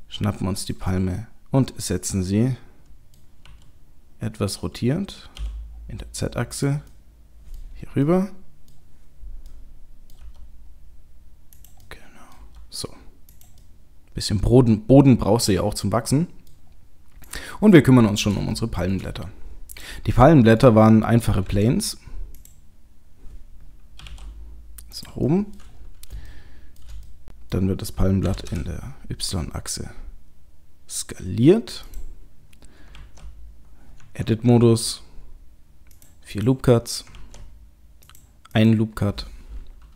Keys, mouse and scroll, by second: 0.9 middle click, 3.5 r, 6.9 middle click, 8.1 middle click, 10.2 g, 11.8 middle click, 12.4 g, 13.6 middle click, 16.7-17.3 scroll up 1, 17.3 click, 17.8 middle click, 18.4 shift+middle click, 19.1-19.8 scroll up 2, 19.8 click, 20.3 middle click, 20.5 middle click, 20.9-21.4 scroll down 1, 21.5 shift+a, 23.0-23.9 scroll down 3, 24.0 g, 25.3 middle click, 25.7-26.3 scroll up 3, 26.3 shift+middle click, 27.1 middle click, 28.2 s, 32.9 ctrl+r, 33.9 Tab, 34.6 ctrl+r, 37.0 ctrl+r.